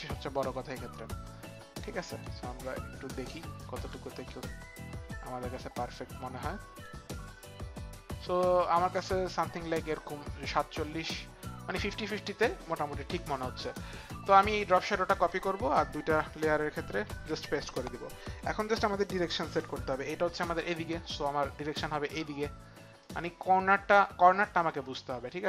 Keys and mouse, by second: 9.7 click, 13.6 click, 14.3 click, 15.1 ctrl+c, 16.1 ctrl+c, 16.1 click, 16.4 ctrl+c, 16.4 ctrl+click, 17.0 ctrl+v, 19.1 ctrl+click, 23.0 click.